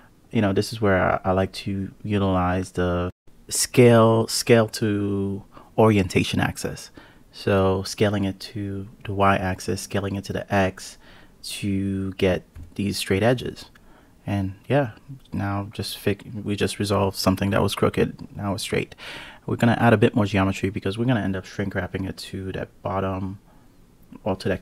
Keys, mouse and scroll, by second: 1.8 s, 4.1 click, 5.1 s, 6.5 click, 7.3 s, 11.9 click, 14.3 ctrl+r, 17.2 ctrl+r, 19.4 ctrl+r, 21.3 click, 22.4 click, 23.6 Tab.